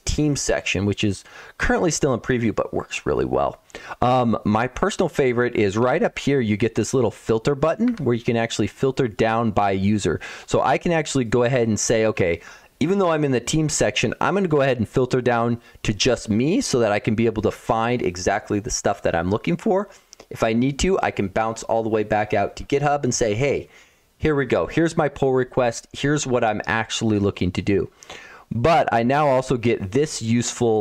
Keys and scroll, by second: 5.6 ctrl+1, 5.8 ctrl+1, 7.7 Escape.